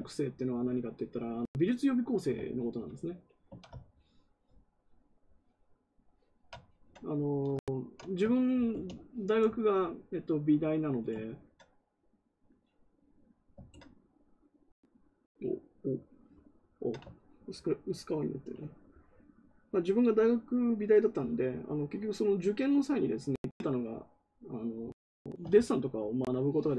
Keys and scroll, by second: 8.6 ctrl+w.